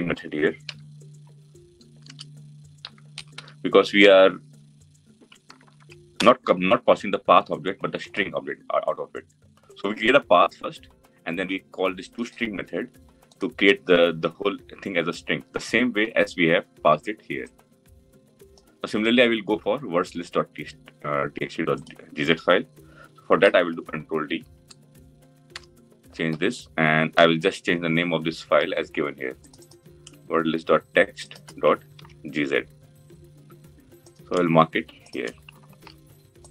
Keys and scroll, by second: 6.0 Return, 23.4 ctrl+d, 31.6 ctrl+c, 35.4 ctrl+v.